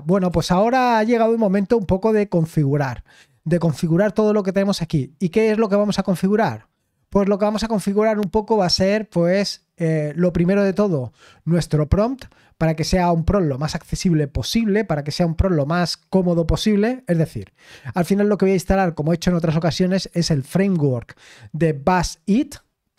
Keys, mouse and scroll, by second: 0.1-0.8 typing.